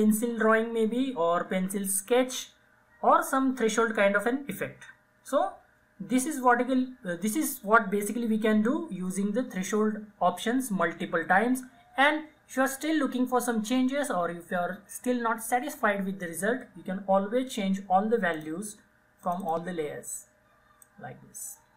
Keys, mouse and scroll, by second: 18.5-21.7 drag.